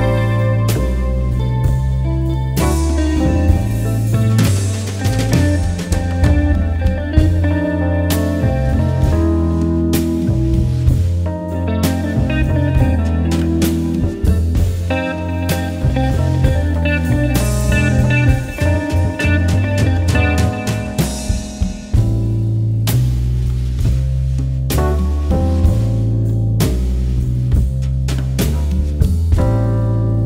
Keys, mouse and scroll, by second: 1.7-6.3 drag, 6.3-7.0 alt+scroll down 1, 8.6-9.0 alt+scroll up 1, 10.2 alt+scroll up 1, 10.6 alt+scroll down 1, 12.1 alt+scroll up 1, 13.9 click, 17.5-18.3 alt+scroll down 1, 18.8-19.3 alt+scroll up 1, 19.3 click, 23.5 alt+scroll down 1, 24.4-25.5 scroll up 3, 25.5 click, 26.0 alt+scroll down 1, 26.7-27.6 alt+scroll up 1, 28.1 click, 29.9 alt+scroll up 1.